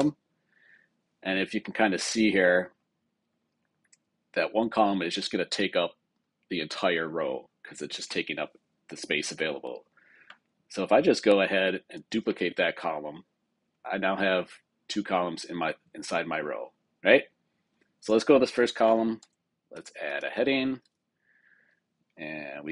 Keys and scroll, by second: 12.0 super+d, 19.1 super+k, 20.5 Return.